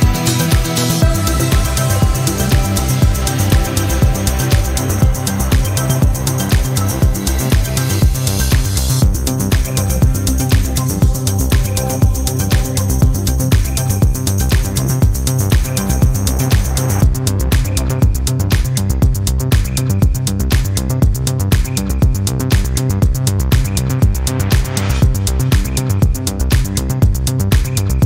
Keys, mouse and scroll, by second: 2.3 click, 5.2 click, 7.0-7.9 scroll down 4, 8.9 click, 9.9 click, 11.1 click, 12.2 0, 13.3 click, 19.5 click, 23.6-25.8 drag, 26.3-28.0 drag.